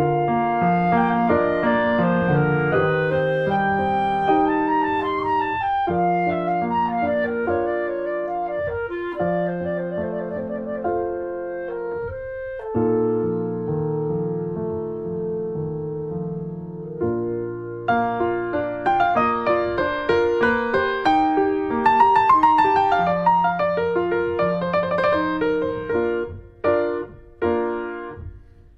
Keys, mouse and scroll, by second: 0.6-2.0 drag, 2.0-2.3 scroll down 2, 2.3 middle click, 2.9 shift+middle click, 3.5 click, 3.8-5.9 middle drag, 5.9 click, 6.0 scroll down 2, 6.1-7.3 middle drag, 7.3-8.3 drag, 8.3 scroll down 1, 8.6 middle click, 9.0 click, 9.2 scroll down 1, 9.8 click, 10.4 middle click, 11.2 middle click, 11.5 click, 12.3-13.4 drag, 13.4 r, 16.1 click, 16.5 r, 18.0 click, 18.6-19.6 drag, 20.3 r, 25.2-26.3 drag, 26.3-27.2 scroll up 2, 26.6 middle click, 27.4 click.